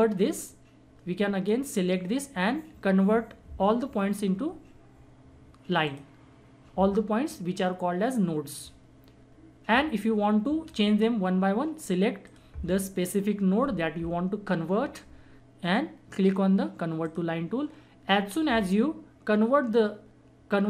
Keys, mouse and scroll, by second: 0.5-3.1 drag, 5.8 click, 8.5 click, 12.2 click, 17.0 click.